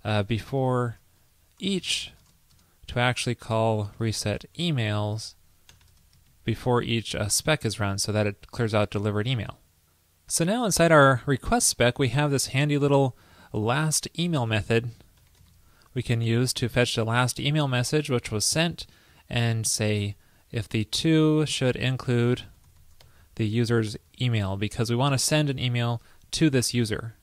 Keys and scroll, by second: 6.3 super+Right, 8.2 super+s, 24.9 super+Right, 26.7 super+s.